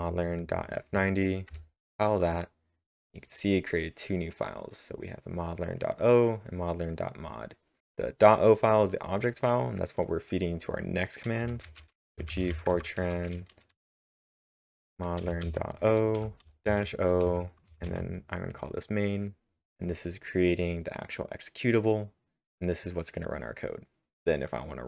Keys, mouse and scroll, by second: 1.5 Return, 11.2-13.0 typing, 14.4 Tab, 15.1-18.2 typing, 19.6 Return.